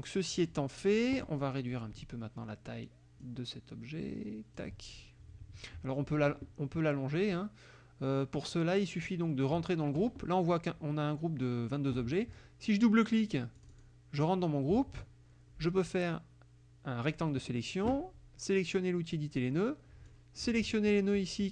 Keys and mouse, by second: 3.2-4.8 ctrl+drag, 5.0 ctrl+click, 13.6 click, 14.2 click, 15.0-17.3 drag, 19.2 click, 20.1 click.